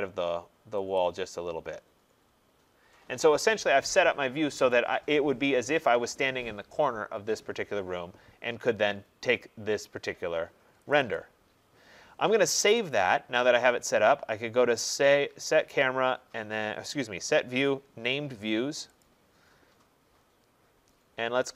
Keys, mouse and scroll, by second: 0.4-1.1 typing, 1.0 click, 10.9 click, 11.2 click, 12.9 click, 19.0 click.